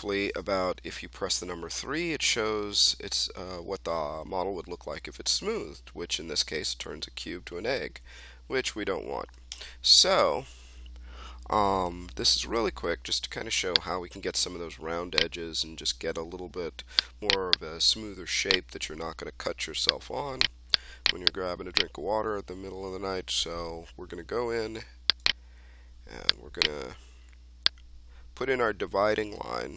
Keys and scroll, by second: 1.6 3, 9.4 1.